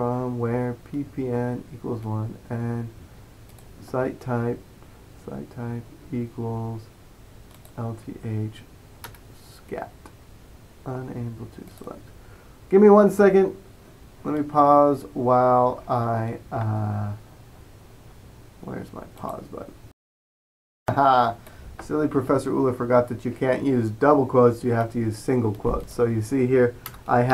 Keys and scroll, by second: 9.2 Return.